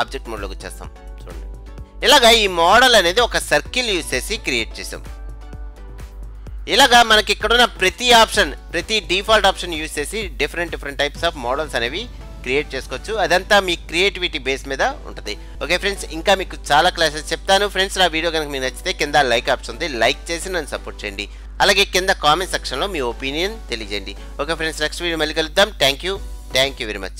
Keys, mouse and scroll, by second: 1.1 middle click, 1.7-3.5 scroll up 1, 3.5-4.2 scroll up 1, 4.2-6.0 middle drag, 8.0-9.8 drag, 9.9 click, 23.7-26.5 drag.